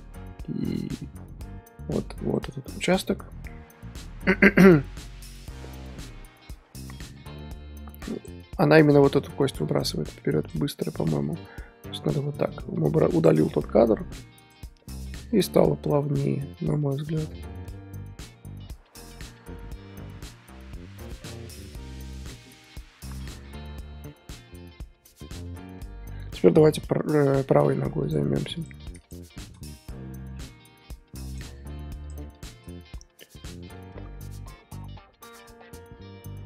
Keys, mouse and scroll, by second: 3.4 scroll up 2, 5.6-6.4 scroll up 1, 6.4-7.1 scroll up 1, 7.1 scroll up 1, 8.3 Left, 9.7 click, 10.5 x, 11.1-15.6 drag, 15.6 scroll down 5, 15.8-25.3 middle drag, 26.1-26.7 scroll up 2, 26.7 KP_3, 27.2-27.9 middle drag, 27.9 scroll up 1, 28.0 click, 28.5 click, 29.0 shift+click, 30.2 KP_3, 31.2-32.1 drag, 32.3 shift+click, 32.8-33.7 scroll up 2, 33.7-36.4 drag.